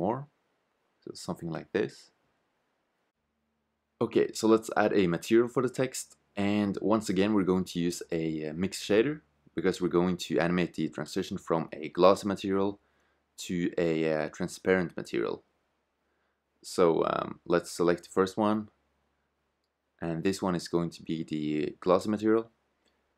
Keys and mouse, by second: 7.4-12.6 drag, 18.1-20.0 drag, 21.7 click.